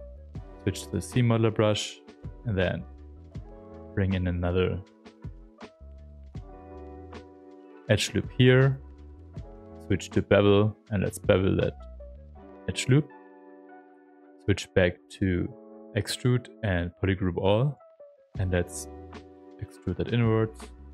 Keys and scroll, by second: 0.0-1.4 typing, 3.0 shift+f, 4.7 ctrl+z, 5.7 space, 9.2 space, 13.9 space.